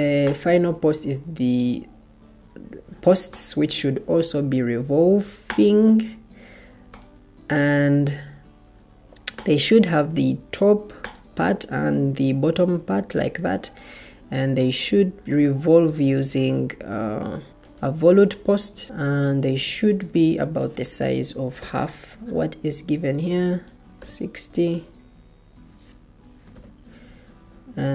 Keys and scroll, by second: 21.1-22.0 typing, 23.8 typing, 25.9-26.4 typing.